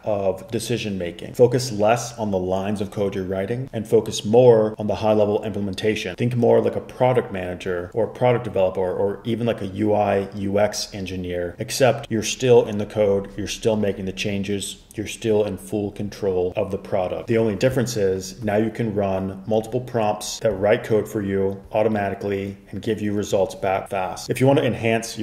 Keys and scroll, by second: 17.2 Escape.